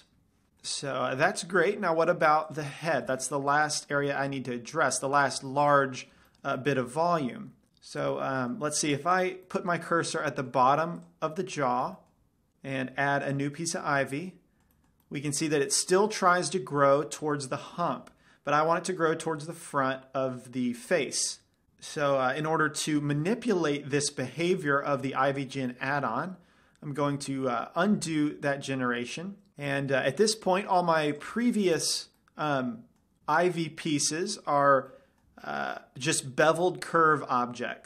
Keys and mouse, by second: 0.8-2.9 middle drag, 2.9 click, 6.2-8.3 middle drag, 8.6-9.3 middle drag, 9.6-10.0 right drag, 10.0 middle click, 10.1 right click, 10.3-12.6 middle drag, 13.7-15.3 drag, 14.6-15.7 middle drag, 22.3-24.8 middle drag, 26.3 middle click, 28.6 ctrl+z, 31.6-33.2 drag, 32.0-36.6 middle drag.